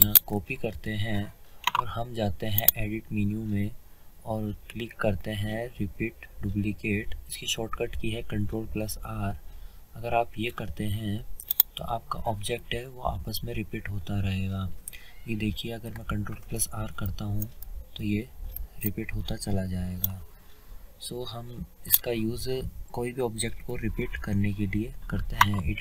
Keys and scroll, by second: 15.9 ctrl+Num_Lock, 17.3 r, 23.6 Delete, 23.6 Num_Lock.